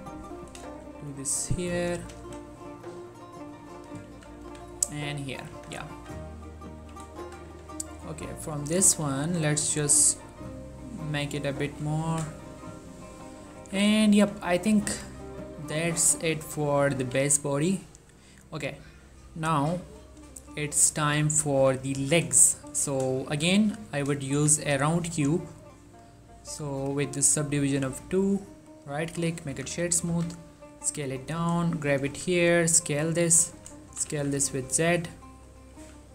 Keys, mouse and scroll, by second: 0.4 click, 0.8 shift+middle click, 1.0 scroll up 1, 1.8 click, 2.1 g, 2.3 y, 2.5-3.9 scroll up 1, 3.9 click, 4.2 z, 4.6 1, 4.9 scroll down 1, 5.2 ctrl+middle click, 5.7 Tab, 6.1 z, 6.6 ctrl+middle click, 7.6 Tab, 8.2 click, 8.9 s, 9.2 x, 9.8-10.2 scroll down 1, 11.1 click, 11.6 ctrl+middle click, 12.7 ctrl+middle click, 13.7 z, 14.0 Tab, 14.7 ctrl+a, 15.0 click, 15.4-17.1 ctrl+middle drag, 17.1 1, 20.4 1, 20.5 shift+middle click, 20.9 ctrl+middle click, 21.7 z, 22.1 z, 22.7 shift+middle click, 23.4 shift+a, 24.4 shift+a, 25.2 click, 27.2-28.1 drag, 28.8 right click, 29.2 click, 29.6 z, 30.2 s, 30.8 click, 30.9 g, 31.9 click, 32.2 s, 33.5 click, 34.0 s, 34.2 z, 35.7 click, 35.9 z.